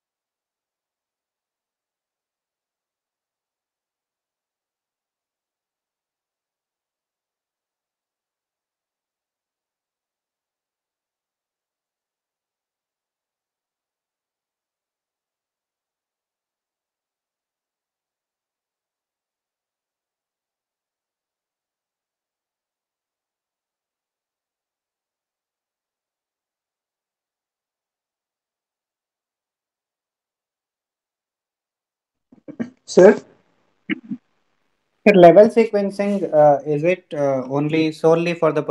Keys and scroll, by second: 16.1 ctrl+z.